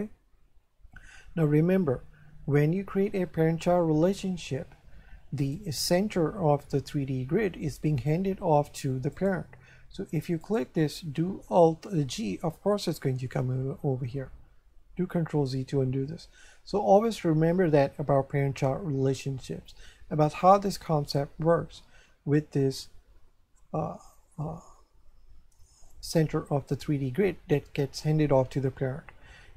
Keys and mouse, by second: 5.4 right click, 9.1 right click, 10.4 right click, 12.1 alt+g, 15.6 ctrl+z.